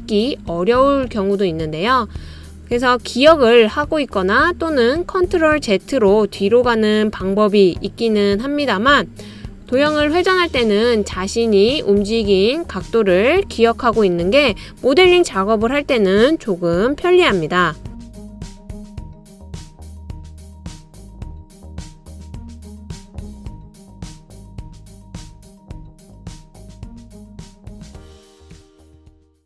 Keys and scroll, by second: 18.2-18.9 typing, 19.0 Return.